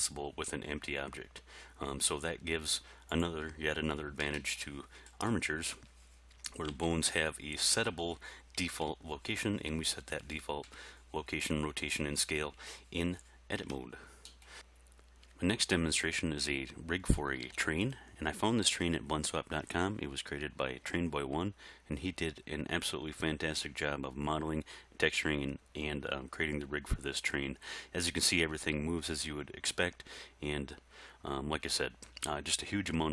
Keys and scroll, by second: 6.7 g, 8.7 Tab, 13.6 Tab, 17.5 alt+a.